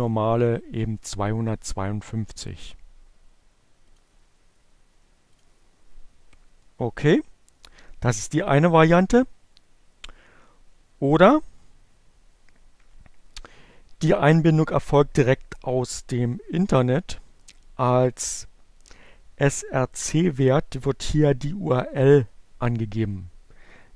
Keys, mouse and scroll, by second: 0.8-3.2 drag, 4.2 click, 20.0 click, 22.7-23.9 drag.